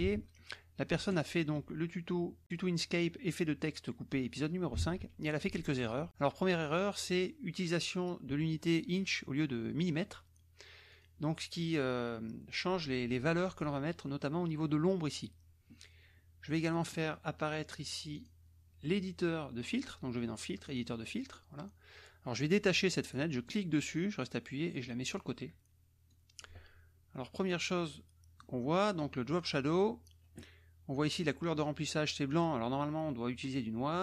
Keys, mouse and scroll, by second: 0.1 alt+Tab, 1.2 alt+click, 4.8 alt+Tab, 6.5-9.1 drag, 10.9 click, 18.1 click, 20.7 click, 23.4-25.3 drag, 26.1 click, 27.4-28.6 drag, 29.2 click, 32.2 click, 33.4 click.